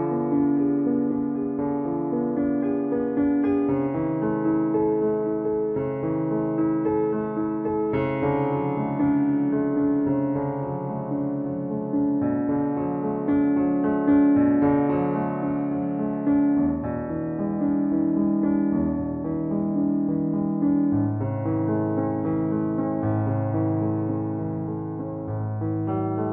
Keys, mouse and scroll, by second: 11.3 click, 12.3 ctrl+z, 16.9 ctrl+z, 17.1 shift+click, 19.8-26.3 middle drag.